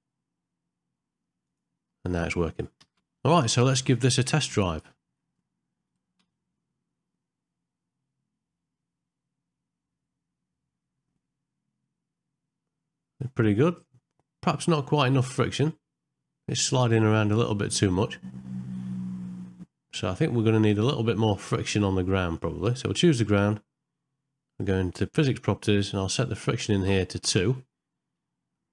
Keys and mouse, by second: 4.2 middle click, 26.3 click, 28.6 shift+middle click.